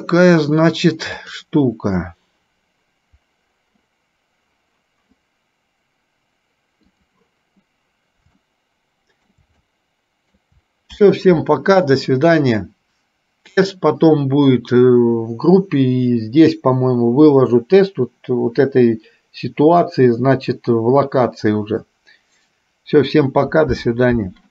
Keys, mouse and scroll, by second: 7.1 click, 8.5-9.5 shift+middle drag, 9.7 shift+middle click.